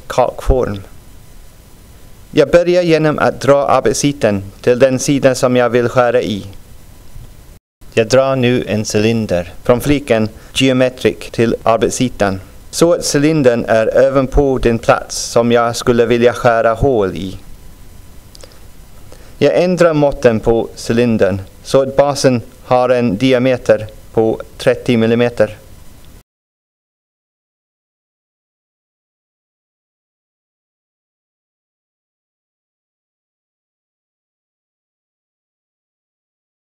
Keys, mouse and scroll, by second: 1.0-3.9 drag, 7.0 click, 7.8 click, 11.9-21.5 drag, 24.8 click, 28.9 click, 32.4 click, 35.1-36.3 drag.